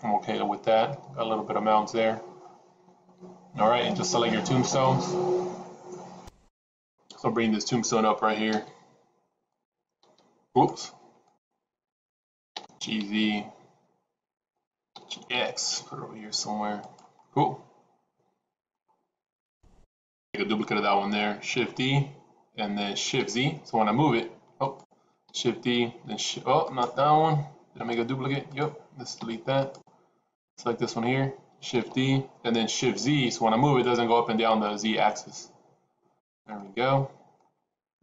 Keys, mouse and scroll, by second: 3.7 click, 4.7 click, 9.5 click, 10.1 g, 11.3 click, 12.5 g, 15.0 g, 17.2-18.8 middle drag, 24.6 click, 25.3 shift+d, 27.7 g, 29.1 x, 30.3 click, 31.7 shift+d, 36.5-37.4 middle drag.